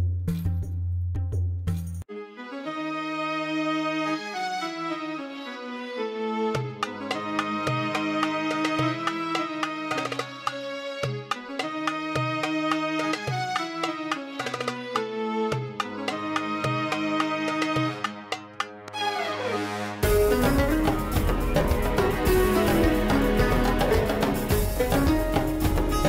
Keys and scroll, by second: 14.0 5, 14.1 1, 14.4 Return, 19.7 0, 19.9 Return, 24.5 ctrl+z.